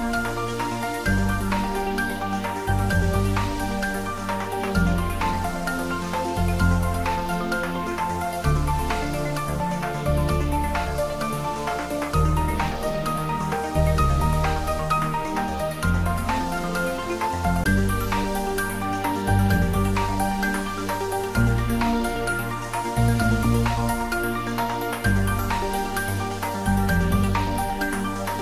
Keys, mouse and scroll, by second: 1.2-4.7 drag, 6.9-11.1 drag, 11.2-16.7 drag, 18.6 click, 20.3-22.0 typing, 24.6-27.6 scroll down 1, 27.6-28.4 middle drag.